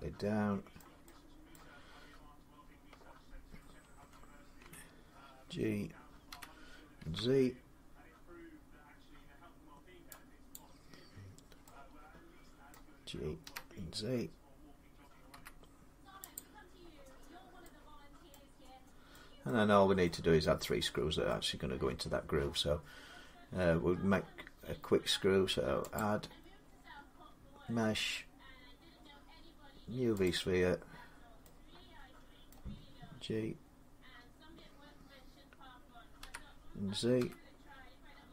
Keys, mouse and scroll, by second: 0.6 middle click, 1.3 middle click, 1.5 scroll, 1.9-3.8 scroll down 1, 3.8 Tab, 4.4 Tab, 6.1-6.8 typing, 6.4 middle click, 10.3 click, 12.5 middle click, 13.2 g, 15.1 z, 16.2 click, 18.1 middle click, 18.4 scroll, 19.1 scroll up 2, 19.3 middle click, 20.2 middle click, 21.3 middle click, 25.8 click, 30.0 click, 30.6 scroll, 32.3 middle click, 36.0-37.3 typing.